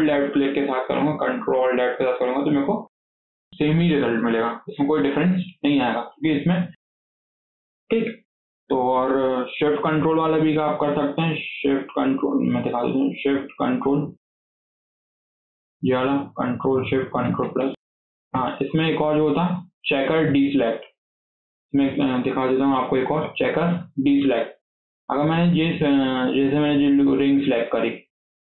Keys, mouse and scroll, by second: 0.0 ctrl+alt+click, 2.2 scroll down 1, 2.5-5.5 shift+middle drag, 10.3-11.4 middle drag, 11.4 shift+click, 11.8 shift+click, 12.2 click, 12.6 click, 13.5 shift+click, 14.1 shift+click, 15.0 shift+click, 15.3-16.9 middle drag, 16.9 ctrl+shift+KP_Add, 17.1 ctrl+shift+KP_Add, 17.3 ctrl+shift+KP_Add, 17.4 ctrl+shift+KP_Add, 18.2 KP_1, 18.8 click, 19.1-23.8 shift+middle drag, 25.0-26.4 middle drag, 26.4 alt+click.